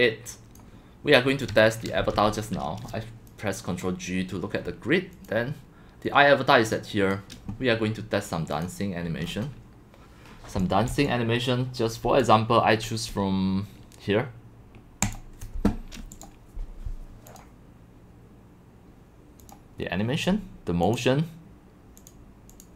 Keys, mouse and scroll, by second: 1.5 click, 2.0 ctrl+g, 3.8 click, 6.4-7.1 drag, 8.5 click, 9.2 middle click, 9.2 scroll down 5, 9.4-9.9 scroll, 10.6 click, 10.6 x, 11.0-12.0 c, 11.2-11.6 drag, 12.2 click, 15.0 click, 16.1 click, 19.4 click, 19.6-21.8 drag, 22.6 click.